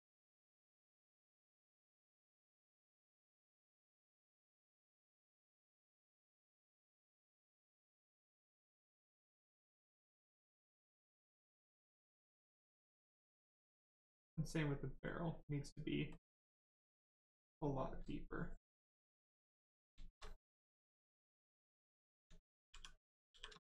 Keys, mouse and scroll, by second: 0.9 right click, 3.2 right click, 4.5 click, 7.3 right click, 15.0 click, 16.7 right click, 18.5 alt+right click, 19.4 click, 19.7 right click, 19.9 shift+right click, 20.5 ctrl+click, 20.9 ctrl+click, 22.2 shift+click, 22.7 shift+f, 23.3 shift+f, 23.6 right click.